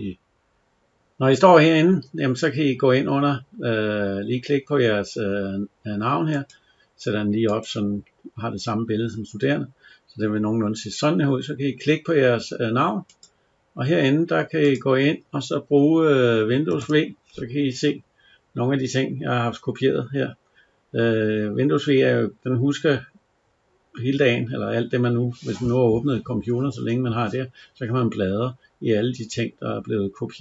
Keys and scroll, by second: 16.6 super+v.